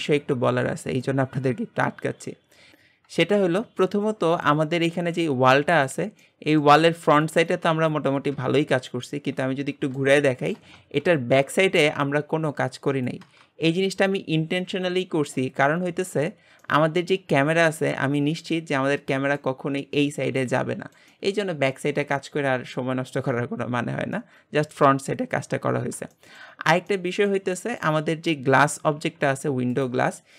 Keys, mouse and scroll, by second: 2.7 click, 4.5 click, 5.0 g, 6.3-15.7 middle drag, 15.7-16.7 scroll up 1, 16.7-17.4 middle drag, 17.4-18.4 scroll down 2, 18.4-19.6 middle drag, 19.6-19.9 scroll up 3, 20.4-25.7 middle drag, 25.7-26.1 scroll down 2, 26.1-28.0 shift+middle drag, 28.0-28.6 scroll up 1, 28.6 click, 29.1 g.